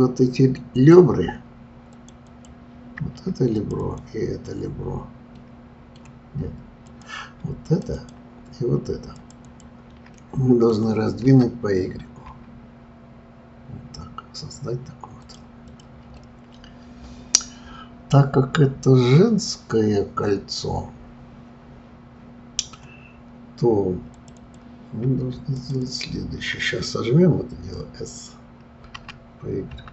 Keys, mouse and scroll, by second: 0.7 click, 1.9 click, 2.2 click, 3.6 shift+click, 3.8 shift+click, 5.3-6.9 middle drag, 6.9 click, 7.6 shift+click, 7.9 shift+click, 9.1 shift+click, 9.4 shift+click, 10.2-11.2 middle drag, 11.2 s, 15.6 click, 16.1-19.2 middle drag, 24.1 click, 24.4 click, 25.5 shift+click, 25.8 shift+click, 29.0 s.